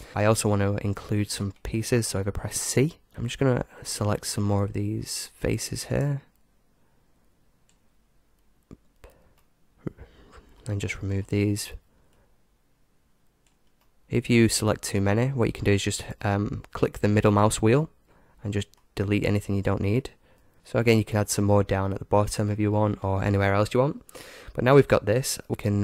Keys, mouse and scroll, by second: 0.5-3.1 middle drag.